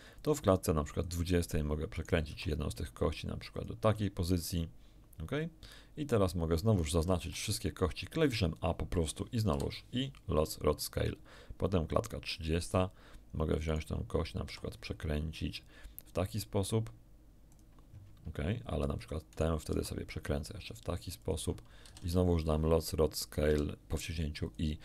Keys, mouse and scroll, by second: 1.9 middle click, 2.3 r, 3.5 ctrl+click, 6.9 a, 7.1 a, 9.5 i, 10.3 click, 12.3 click, 13.6 right click, 14.4 r, 17.5 ctrl+click, 19.3 right click, 19.7 r, 21.1 ctrl+click, 21.8 ctrl+a, 22.0 ctrl+a, 23.4 i, 24.4 click.